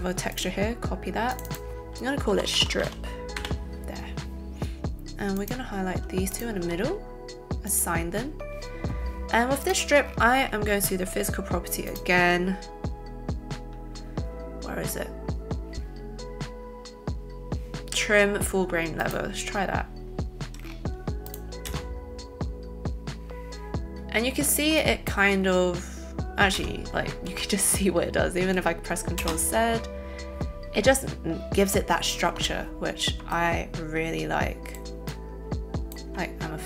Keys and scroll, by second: 2.3-3.3 typing, 21.7 space, 26.5 space, 27.0 ctrl+space, 27.2 ctrl+z.